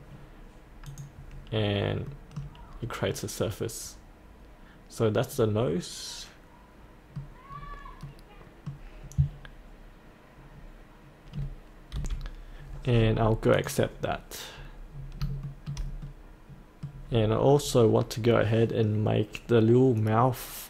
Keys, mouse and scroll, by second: 0.9 click, 1.5-2.1 scroll up 1, 2.1 middle click, 2.7-3.1 scroll up 1, 3.1-7.3 middle drag, 7.5-8.0 scroll down 1, 8.0 middle click, 12.0 F8, 13.6 click, 14.9-15.2 scroll down 1, 15.5 shift+middle click, 16.1-17.6 middle drag, 18.2-20.6 scroll down 1.